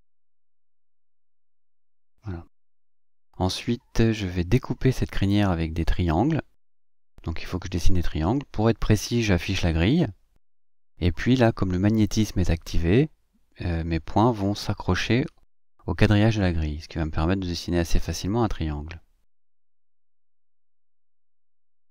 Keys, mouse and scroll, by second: 1.0 click, 2.0 click, 3.6 click, 5.0 click, 7.5 click, 8.8 click, 12.2 click, 14.8 click, 18.1 click.